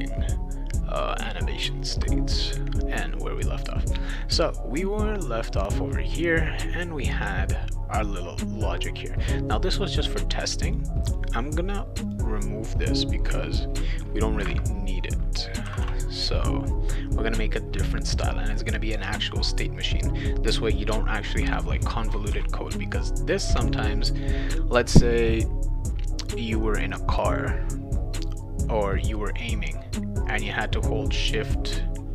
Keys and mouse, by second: 3.7 click, 9.8-10.8 drag, 11.1 click, 12.0 click, 22.3 ctrl+s.